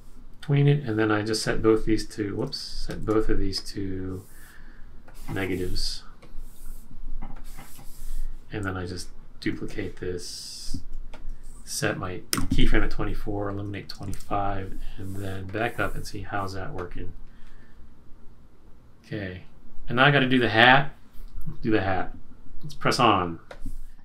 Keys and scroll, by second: 2.4 alt+super+z, 12.3 F6, 13.9 F6, 14.0 shift+F5.